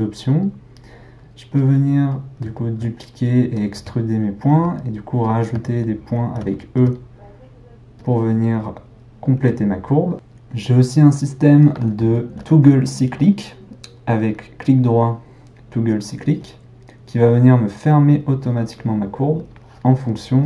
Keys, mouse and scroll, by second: 2.1-3.7 middle drag, 3.7 e, 5.9 ctrl+middle click, 6.8 e, 11.2-14.2 middle drag, 14.2-17.2 right drag, 19.6 drag.